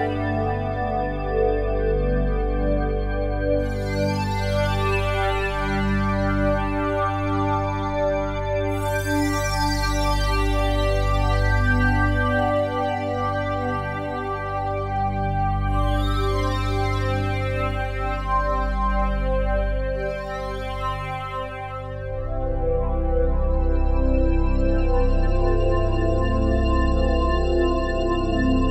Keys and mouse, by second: 0.0 Escape, 0.2 Escape, 0.8 Escape, 1.1 Escape, 2.7-4.9 drag, 4.9 5, 5.0 0, 5.4 Return, 6.7 click, 10.2 click, 12.7 right click, 13.9 click, 14.8 click, 15.7 click, 16.1 alt+click, 17.3 click, 17.5 click, 18.2 click, 19.6 right click, 20.4 click, 21.4 right click, 22.4 click, 23.4 right click, 24.2 click, 25.3 ctrl+s, 25.8 F12.